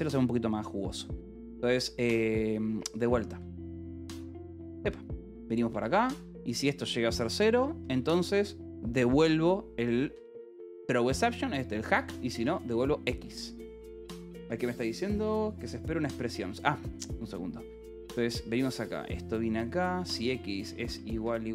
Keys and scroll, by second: 4.8-6.3 typing, 8.3 Escape, 9.1 h, 10.1 l, 10.7 h, 11.4 l, 12.9 ctrl+s, 13.8 space, 14.0 n, 14.3 Escape, 15.1 h, 15.5 l, 16.4 h, 19.0 l, 20.8-21.5 typing, 21.1 Escape.